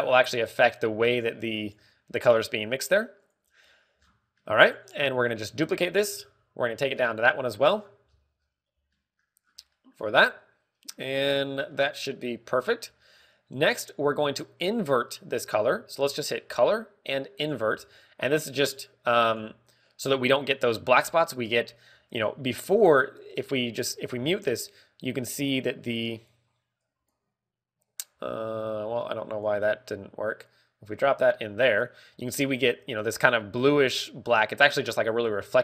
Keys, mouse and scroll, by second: 4.1 click, 4.5 scroll down 1, 5.3 middle click, 5.3-5.7 scroll down 9, 6.6 shift+d, 7.9 click, 7.9 shift+d, 8.7-9.2 scroll down 5, 9.0-9.5 scroll up 8, 9.8 middle click, 10.4 scroll down 1, 10.6 middle click, 11.0 scroll up 1, 11.9 middle click, 12.6 middle click, 13.5 middle click, 16.9 shift+a, 18.5 g, 19.2 click, 19.2 g, 19.7 click, 22.4 click, 24.7 click, 25.1 m, 27.1 click, 27.7 click, 29.0 scroll up 4, 29.9 click, 31.3 click.